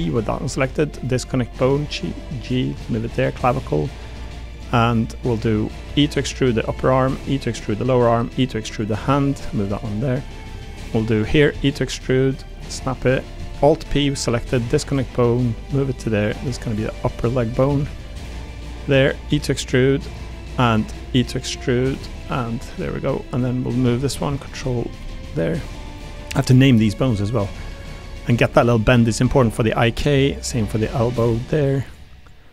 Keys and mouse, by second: 1.3 g, 2.7 1, 2.9 click, 3.2 g, 4.7 g, 5.8 e, 7.0 e, 8.1 e, 9.3 g, 11.1 click, 11.5 e, 12.4 middle click, 12.7 click, 13.1 click, 13.8 alt+p, 15.0 g, 16.6 g, 17.7 ctrl+z, 17.9 click, 18.1 g, 19.0 click, 19.3 e, 21.0 e, 22.4 click, 25.0 g, 26.1 g, 27.0 click, 27.4 g, 28.3 click, 28.5 g, 29.6 middle click, 31.2 g, 32.4 click.